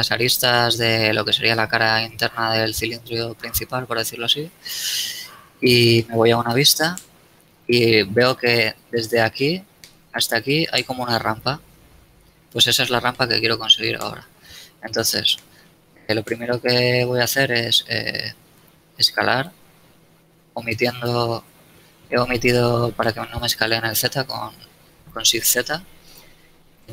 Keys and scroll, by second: 4.7 z, 4.8 KP_1, 6.6 KP_3, 13.6 shift+z, 18.9 s, 19.2 shift+z, 24.5 s, 24.8 shift+z.